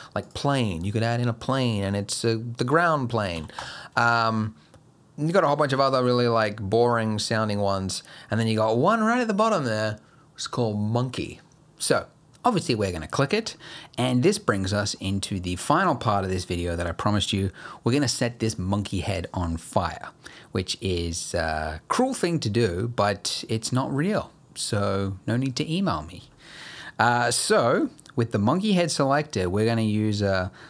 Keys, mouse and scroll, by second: 1.9-3.4 scroll up 3, 3.4 x, 4.0 shift+a, 13.2-13.6 scroll up 3, 13.6 middle click, 14.4 scroll up 1, 14.6 middle click, 15.0 scroll down 1, 15.3 middle click, 26.9 middle click, 27.1 scroll up 1, 27.3 middle click, 27.7-28.9 scroll up 1.